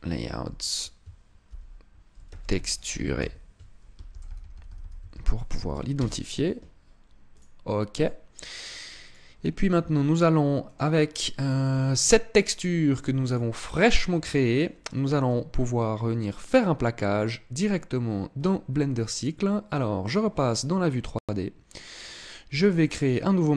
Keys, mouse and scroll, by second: 20.0 click, 22.8 click.